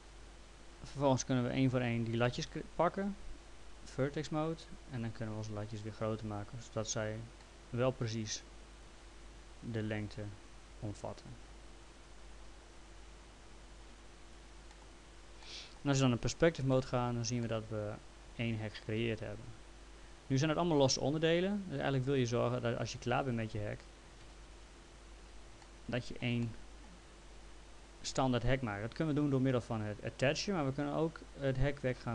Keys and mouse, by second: 1.0 click, 2.5 F3, 3.9 click, 5.7 click, 7.4 middle click, 8.8 click, 11.2 click, 14.3 click, 14.7 middle click, 16.4 p, 16.7 middle click, 17.5 alt+middle click, 21.2 click, 24.4 ctrl+z, 25.6 alt+middle click.